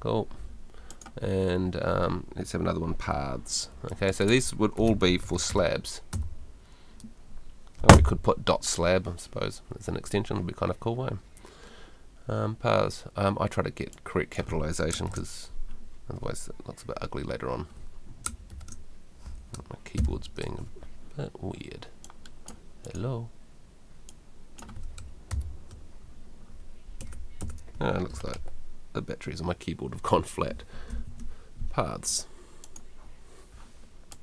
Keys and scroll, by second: 2.8-6.1 typing, 30.9 shift+p.